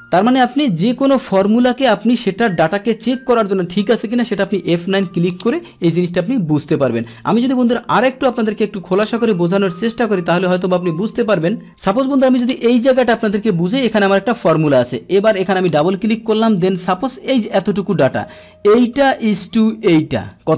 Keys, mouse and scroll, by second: 1.2 click, 15.3 click, 15.4 click, 17.7-20.3 drag.